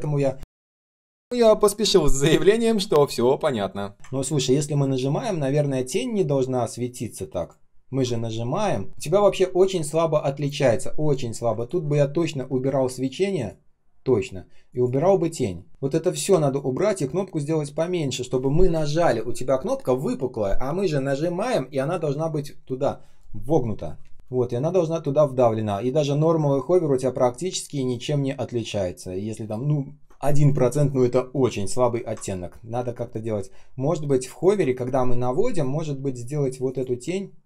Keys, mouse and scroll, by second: 1.2 ctrl+click, 4.0 ctrl+scroll up 1, 6.3-7.3 ctrl+scroll down 1, 7.3 ctrl+click, 11.5 ctrl+click, 16.5 ctrl+click, 24.8 ctrl+scroll up 1, 26.6 ctrl+scroll down 1, 27.1 ctrl+scroll up 1, 32.1 ctrl+scroll down 1, 33.0 ctrl+scroll up 1.